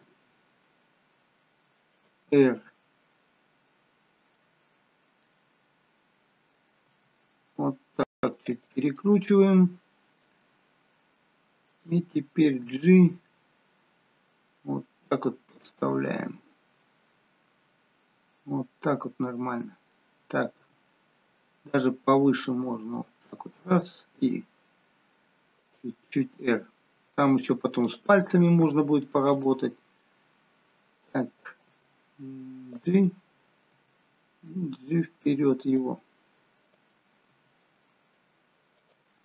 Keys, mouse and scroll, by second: 0.0 r, 2.4 middle click, 4.9-5.3 scroll up 3, 5.3 middle click, 7.0 r, 8.9 middle click, 12.6 middle click, 12.6 g, 15.9 middle click, 20.6 g, 24.1 r, 26.9-27.8 scroll down 1, 27.8 click, 29.2 shift+click, 29.9 middle click, 31.7 g, 33.7 g, 36.6 click, 37.3 g.